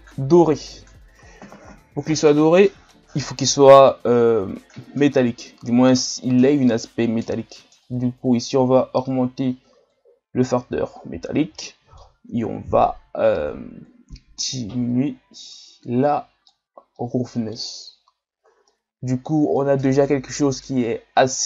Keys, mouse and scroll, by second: 3.1-17.1 drag, 17.1-18.1 middle drag, 18.1-18.7 scroll down 3, 18.7-21.4 middle drag.